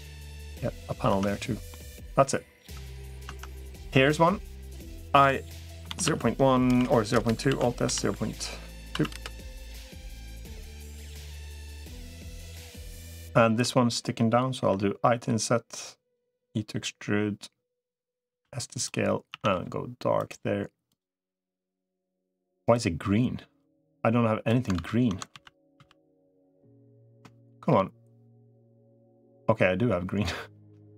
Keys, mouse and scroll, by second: 0.0 click, 0.3 middle click, 1.0 Tab, 1.5 middle click, 3.2 Tab, 5.0 i, 7.4 alt+s, 11.0 click, 12.1 middle click, 13.0 shift+middle click, 14.4 i, 16.2 e, 18.2 s, 19.2 a, 19.4 g, 23.6 click, 24.6 ctrl+z, 25.2 ctrl+z, 25.6 ctrl+z, 26.3 middle click, 27.2 shift+middle click, 28.2 click, 28.4-30.8 middle drag, 30.6 g.